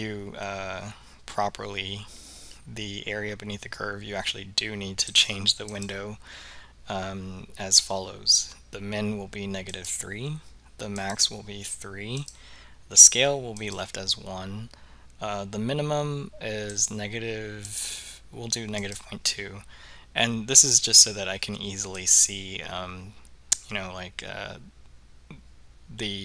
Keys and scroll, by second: 5.8 3, 9.9 Return, 11.1 3, 12.3 Return, 13.7 Return, 17.8 ., 18.9 2, 22.1 Return.